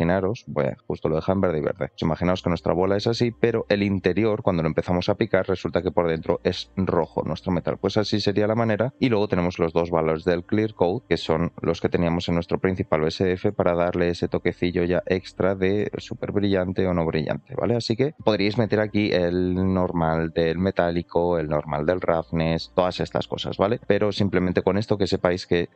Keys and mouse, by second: 3.6 click, 6.2-6.7 middle drag, 7.0-7.6 middle drag, 8.7 middle drag, 9.1 middle click, 11.0 click, 11.7-13.6 drag, 14.1-15.8 drag, 16.6-17.8 drag, 18.1 click.